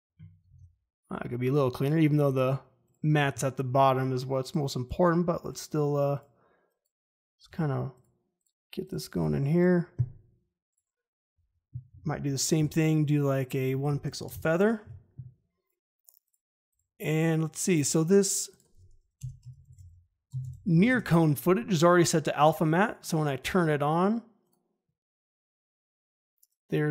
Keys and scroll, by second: 0.4 ctrl+z, 7.4 ctrl+z, 12.5 f, 14.2 1, 14.3 Return, 14.8 `, 19.1 Return, 19.2-21.2 typing.